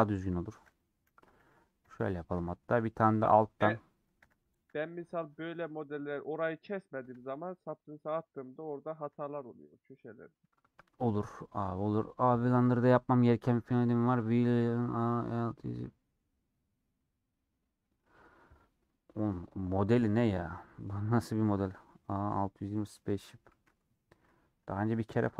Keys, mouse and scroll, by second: 1.9 ;, 2.4-3.5 middle drag, 3.5 click, 4.3 a, 5.7-7.2 middle drag, 7.2 Tab, 7.3-9.8 middle drag, 9.8 h, 10.1 scroll down 1, 10.1 scroll up 1, 10.2-10.7 scroll down 4.